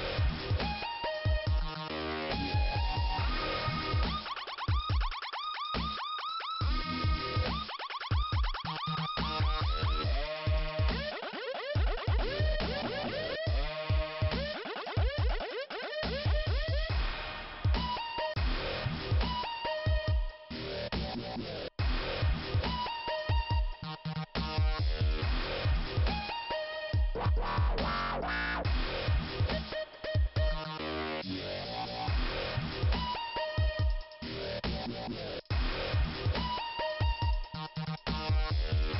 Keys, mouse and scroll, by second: 1.3 click, 3.3 click, 7.0 click, 8.1 click, 8.2 click, 9.8 click, 11.3 click, 12.3 p, 12.8 scroll down 2, 15.1 scroll up 2, 17.1 click, 17.8 right click, 18.7 click, 19.4 click, 20.3 click, 22.6 click, 24.1 click, 25.2 click, 26.1 click, 27.5 click, 28.0 click, 29.0 scroll down 2, 32.3 scroll up 2, 33.4 click, 34.2 click, 35.1 click, 35.9 click, 36.0 click, 36.2 click, 37.5 click, 38.1 click.